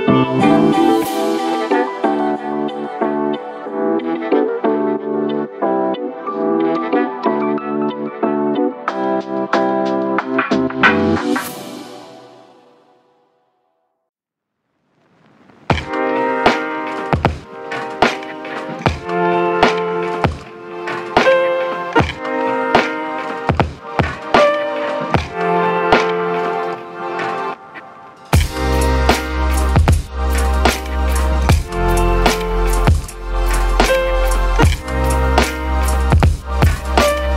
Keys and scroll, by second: 0.0-0.7 typing, 1.8 v, 4.6 ctrl+z, 10.3 Delete, 12.3 Delete.